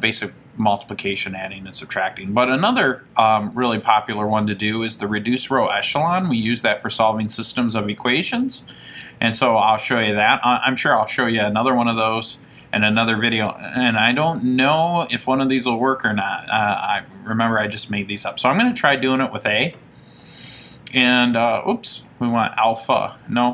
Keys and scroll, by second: 5.6 Down, 5.9 Down, 6.3 Down, 6.5 Down, 6.7 Down, 7.3 Down, 7.6 Down, 8.5 Down, 9.1 Down, 10.1 Down, 11.5 Down, 14.2 Return.